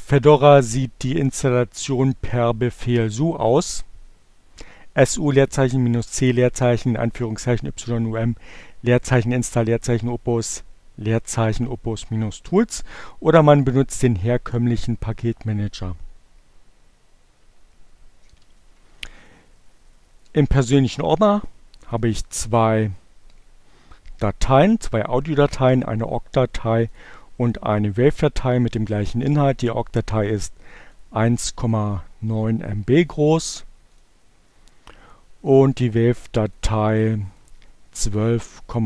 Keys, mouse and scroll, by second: 17.2 BackSpace, 21.3 click, 25.3 click, 25.7-26.8 drag, 27.8-29.1 drag, 29.1 middle click, 30.1 right click, 30.3-32.1 middle drag, 32.1 click, 33.9 click, 35.3 click, 36.0 click, 36.5 right click, 38.7 click.